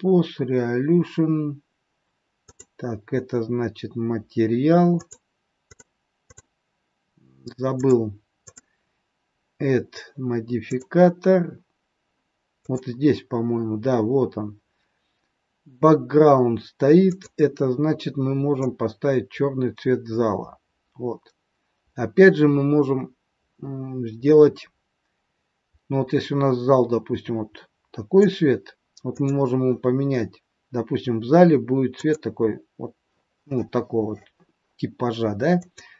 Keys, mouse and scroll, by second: 2.4 click, 4.8 click, 5.6 click, 6.2 click, 7.8 click, 8.5 click, 10.7 click, 12.6 click, 17.0 click, 29.0 click, 35.7 click.